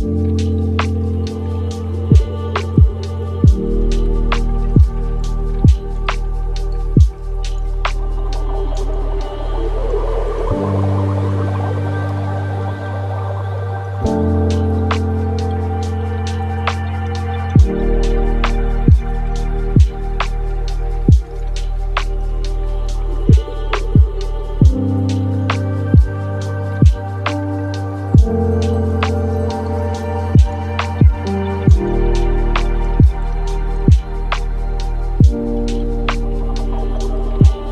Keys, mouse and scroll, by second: 1.3-2.1 scroll up 3, 2.1-2.9 scroll down 1, 2.9-4.4 drag, 6.7-7.9 drag, 8.0-8.4 drag, 8.4-9.0 scroll down 13, 9.0-10.0 scroll up 1, 10.0-10.3 scroll down 3, 10.7-11.2 drag, 11.2-11.9 scroll down 1, 11.9-12.7 scroll down 4, 12.7-15.4 drag, 15.4 space, 22.8-24.9 scroll up 2, 24.9 scroll down 2, 26.1 space, 27.0-28.7 drag, 28.7-29.4 middle drag, 29.4-30.6 scroll down 6, 31.0 KP_0, 32.9 click, 33.5-34.0 scroll down 6, 34.0-34.9 middle drag, 34.9 shift+a.